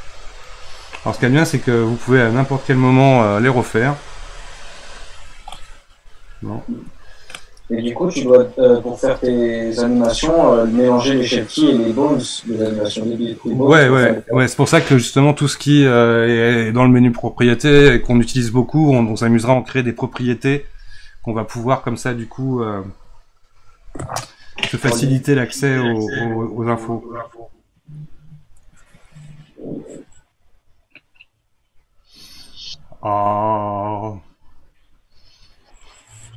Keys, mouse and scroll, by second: 0.5 click, 1.2 click, 4.0 F2, 6.8 click, 25.2-26.8 middle drag, 26.8 click, 33.7 click.